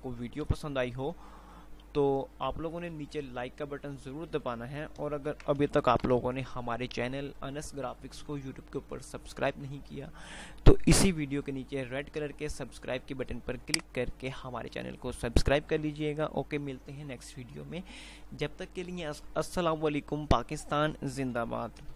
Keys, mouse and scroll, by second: 0.5 F3, 3.0 F2, 4.0 F2, 6.2 F2, 14.5 ctrl+click, 15.0 ctrl+Num_Lock, 15.7 ctrl+click.